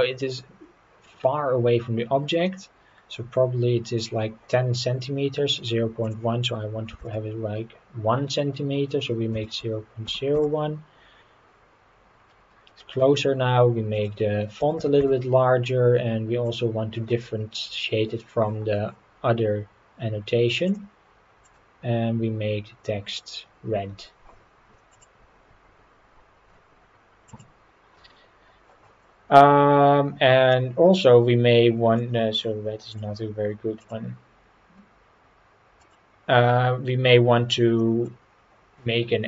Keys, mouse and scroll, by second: 2.4-4.0 middle drag, 6.0-11.4 drag, 12.1 scroll up 3, 12.7-13.0 middle drag, 13.9-16.0 drag, 16.4 click, 20.7 click, 30.5-32.0 middle drag, 32.9 click, 37.8 middle drag, 38.2-39.2 scroll up 3.